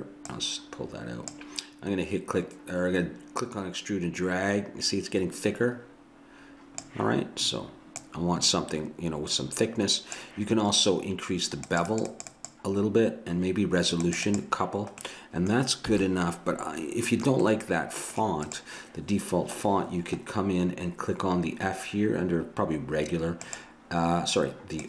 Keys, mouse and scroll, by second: 0.3-3.0 drag, 3.4-5.3 drag, 8.0-9.8 drag, 11.7-16.2 drag, 15.1-16.9 middle drag, 15.1-16.2 right drag, 16.0 a.